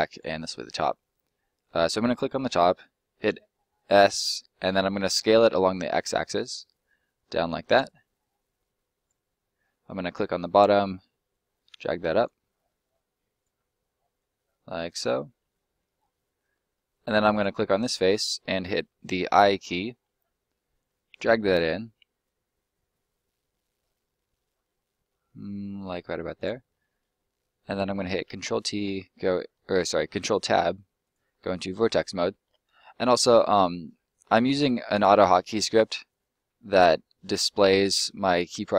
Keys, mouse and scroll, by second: 0.1 right click, 0.3 middle click, 3.2 s, 5.5 x, 7.7 click, 7.8 middle click, 8.9 right click, 9.6 middle click, 11.3 click, 12.4 middle click, 13.3 right click, 14.1 click, 15.3 middle click, 16.5 scroll up 1, 16.7 middle click, 17.3 right click, 17.7 middle click, 26.3 click, 26.6-27.0 scroll up 1, 27.1 middle click, 31.0 click, 31.4-31.7 scroll up 1, 32.0-32.9 scroll down 1, 32.9 middle click, 35.9 middle click, 38.5 middle click.